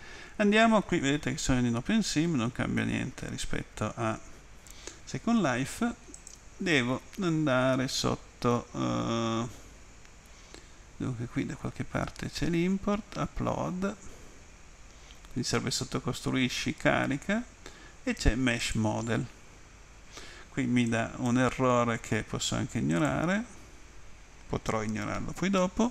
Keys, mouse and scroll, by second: 1.6 Left, 3.6 Left, 6.2 click, 18.7 click, 20.9 click, 22.9 click.